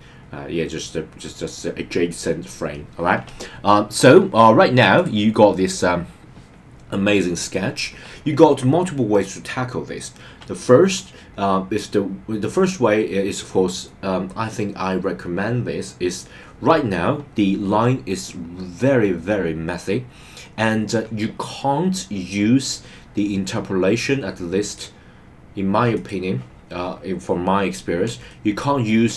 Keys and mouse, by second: 24.6-26.1 drag, 28.3 shift+middle click.